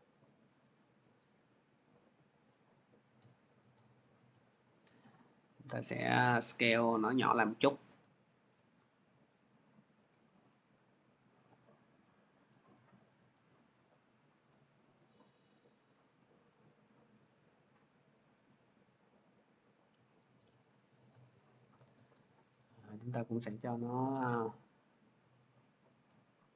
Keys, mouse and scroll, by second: 3.1 click, 3.8-4.3 scroll, 8.4 shift+click, 13.1 click, 19.5 click, 20.0 scroll, 22.8 click, 22.8 scroll, 24.0-24.5 scroll, 25.9 scroll.